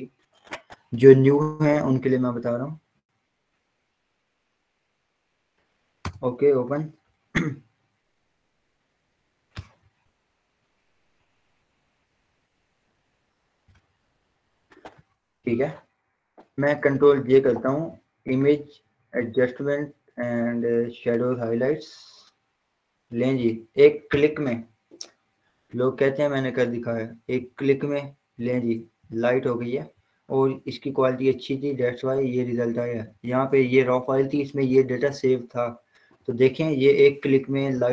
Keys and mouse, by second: 12.2 Return, 12.8 click, 14.3 ctrl+0, 16.3 ctrl+j, 17.6 click, 20.4 click, 23.2 click, 26.1 click, 35.9 click.